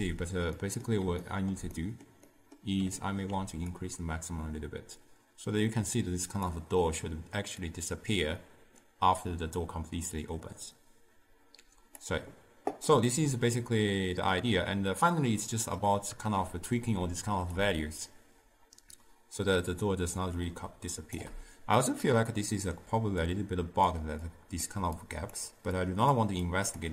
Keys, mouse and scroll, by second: 3.9-10.7 drag, 12.9-16.0 middle drag, 17.7-20.6 shift+drag, 21.8-22.9 middle drag, 22.9 d, 23.3-26.9 drag.